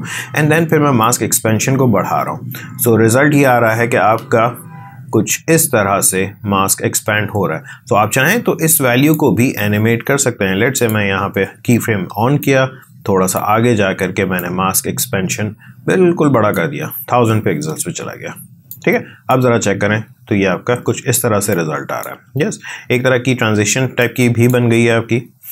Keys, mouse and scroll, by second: 1.0-18.7 drag, 18.7 click, 19.3 space, 21.5 click, 22.1 space, 23.9 click, 24.5 space.